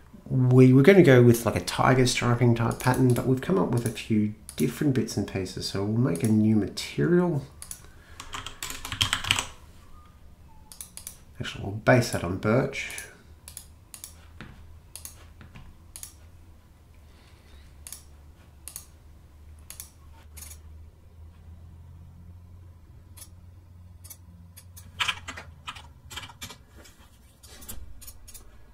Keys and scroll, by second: 8.1-9.9 typing, 25.0-26.7 typing, 25.2 Tab.